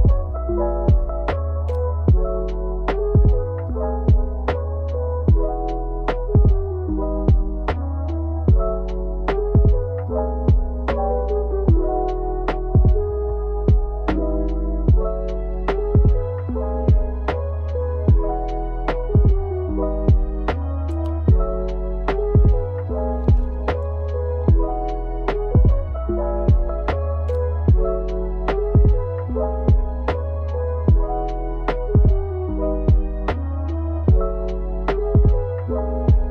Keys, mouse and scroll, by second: 0.9 KP_Subtract, 1.6 KP_1, 1.7 KP_8, 1.8 KP_0, 2.9 Return, 4.2 i, 7.4 click, 11.8 r, 12.6 KP_Subtract, 13.2 KP_1, 13.2 KP_8, 13.3 KP_0, 14.2 Return, 15.4 i, 19.6-24.2 drag, 24.2 shift+Left, 25.5 space, 33.2-36.3 middle drag.